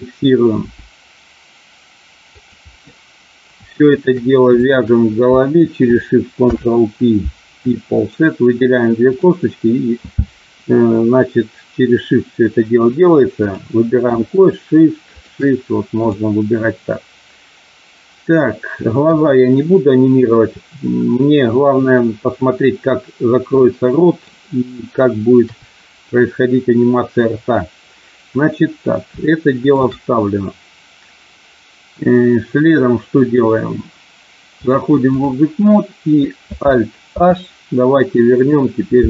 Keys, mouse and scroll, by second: 0.5 g, 2.4 click, 4.7 shift+click, 6.4 ctrl+p, 14.2 shift+click, 15.9 click, 19.0 KP_1, 23.5 middle click, 25.4 KP_3, 29.3 shift+middle click, 34.6 click, 37.0 alt+h.